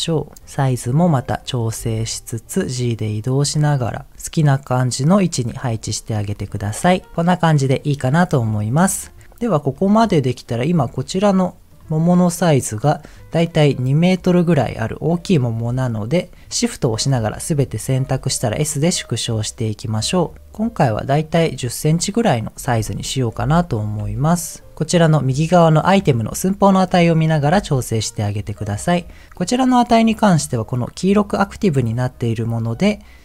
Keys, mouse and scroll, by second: 0.3 click, 0.3 s, 1.0 click, 1.3 middle click, 1.7 g, 3.4 click, 3.8 middle click, 4.1 click, 4.1 g, 4.3-5.6 middle drag, 5.7 middle click, 6.4-6.8 scroll down 2, 6.8 click, 7.1-8.2 middle drag, 9.7-10.8 middle drag, 11.6 click, 12.1 click, 15.7 shift+click, 16.2 shift+click, 18.0 s, 19.8 click, 20.1 scroll up 2, 21.1 click, 23.5 KP_1, 24.0 g, 24.7 shift+middle click, 27.8 g, 28.6 click.